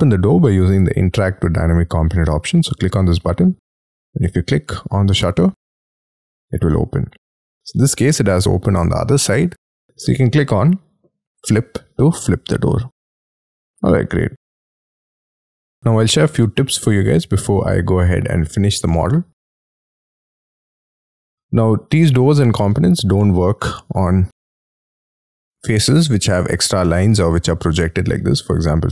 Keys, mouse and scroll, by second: 6.7 middle click, 7.9-8.4 scroll down 7, 13.9 middle click, 15.4 space, 15.5 scroll down 7, 15.8 shift+middle click, 16.9 middle click, 20.0-20.5 scroll up 13, 20.6 double click, 20.9 double click, 21.0 middle click, 22.0 scroll down 4, 22.3 scroll up 1, 24.3 scroll up 2, 25.6 scroll up 1, 25.8 middle click, 26.8-27.6 scroll up 11, 28.1-28.9 scroll down 20.